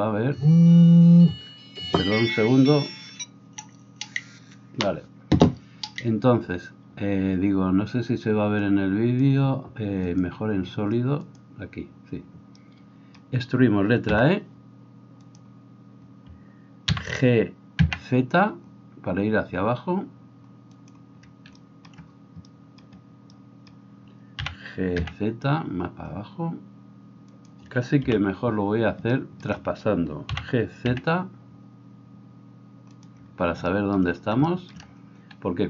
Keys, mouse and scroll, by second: 8.7-10.2 drag, 10.2-11.3 middle drag, 11.3 click, 11.5-35.6 middle drag, 15.4 e, 17.2 g, 24.7 g, 28.1 KP_1, 30.4 g.